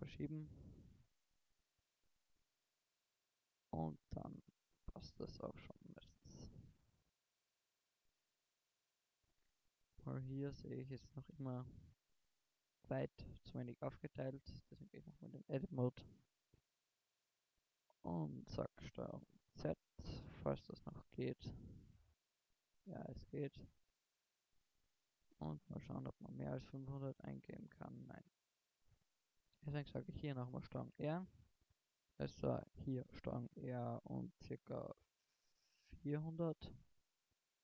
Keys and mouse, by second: 0.2 Tab, 1.0 Tab, 2.9 g, 4.9-5.9 drag, 7.1 g, 9.4-10.1 drag, 11.1-12.0 middle drag, 14.4 middle click, 14.7 Tab, 19.3 ctrl+z, 19.7 ctrl+z, 21.6 ctrl+z, 22.9 ctrl+z, 24.5 ctrl+r, 28.5-29.7 drag, 29.7 ctrl+r, 30.3-32.8 drag, 33.8 ctrl+r, 37.1 click.